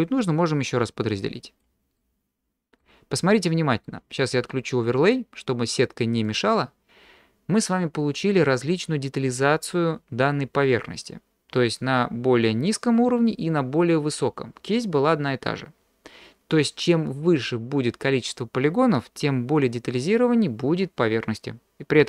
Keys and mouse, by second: 2.0 middle click, 3.3 middle click, 6.2 click.